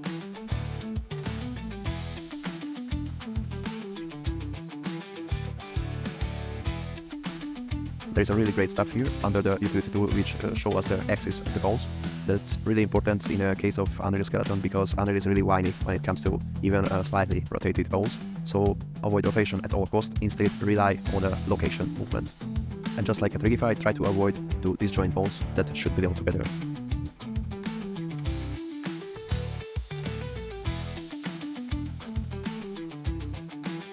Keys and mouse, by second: 0.0-0.9 typing, 0.6 drag, 1.2 drag, 2.0 click, 2.2 g, 2.2 y, 2.3 shift+drag, 2.8 shift+click, 3.3-6.3 typing, 5.2 click, 6.2 click, 11.4 click, 11.7 middle click, 13.0 shift+middle click, 15.5 middle click, 16.4 middle click, 16.9-22.8 middle drag, 24.8 click, 27.4-30.8 typing, 27.5 click, 28.3 click, 28.7 shift+middle click, 28.9 click, 29.4 click, 29.6 click, 29.7 click, 31.3 click, 32.3-33.9 typing, 32.6 click, 32.6 middle click, 33.4 middle click, 33.8 click.